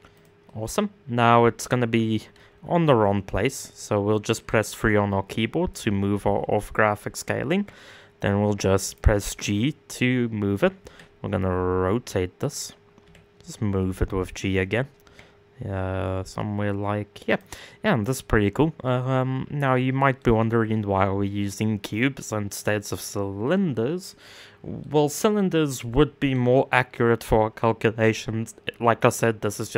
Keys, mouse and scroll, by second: 0.0-1.9 middle drag, 1.9 KP_1, 2.3 KP_3, 5.3 g, 10.4 r, 12.6 g, 17.2-20.2 middle drag, 20.2-21.5 scroll down 1, 21.9-22.4 scroll down 2, 22.4-24.4 scroll up 3, 24.4 middle click, 25.1-25.4 scroll down 1, 25.4 middle click, 26.0 scroll down 1, 26.3 middle click, 26.7-27.2 scroll up 3, 27.2-29.7 middle drag.